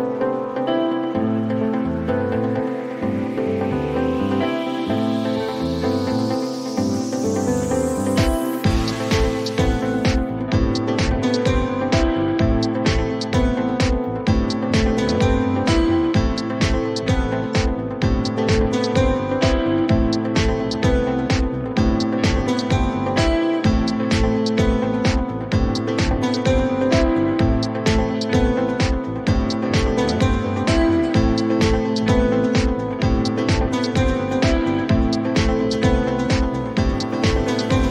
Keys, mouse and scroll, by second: 2.4 click, 3.5 click, 4.8 click, 6.5 click, 9.7 click, 10.3-10.6 typing, 11.0 Return, 13.8 click, 15.9 click, 17.7 click, 21.6 click, 32.4-34.8 typing, 34.0 Return.